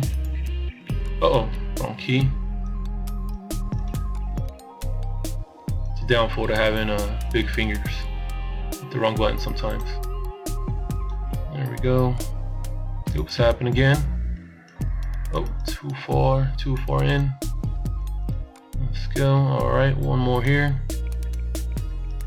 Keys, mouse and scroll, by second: 0.0 b, 3.4 b, 6.4 b, 10.0 n, 10.9 n, 11.2 b, 14.3 b, 17.1 b.